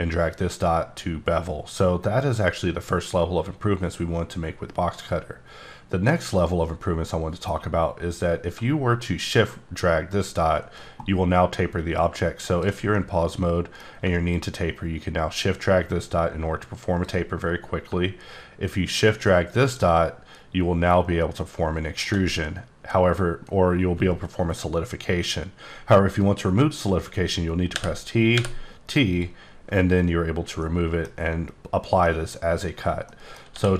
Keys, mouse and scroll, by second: 8.5 click, 10.1-12.9 shift+drag, 13.0 middle click, 14.3-17.1 shift+drag, 27.7 t, 28.3 t, 29.1 click, 30.6 middle click, 31.1 scroll up 1, 31.7-32.0 scroll down 1, 32.0 middle click, 33.1 middle click, 33.5 d.